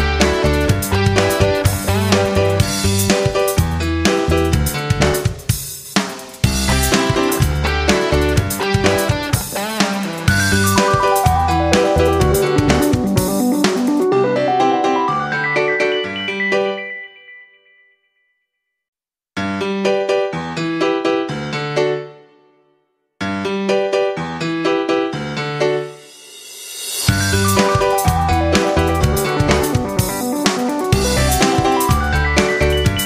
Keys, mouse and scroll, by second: 0.0-0.2 typing, 1.2 Return, 2.3 click, 3.3 click, 4.8-6.0 typing, 6.0 Return, 7.9 click, 18.3 Right, 18.6 Right, 18.6 Right, 21.5 F9, 21.8 click, 25.9 F9, 27.6 click, 30.2 click, 31.3 shift+click.